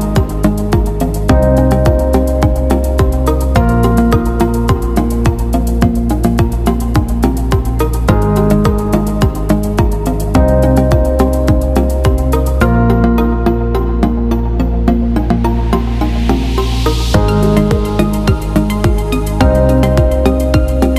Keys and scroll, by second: 12.1 Escape.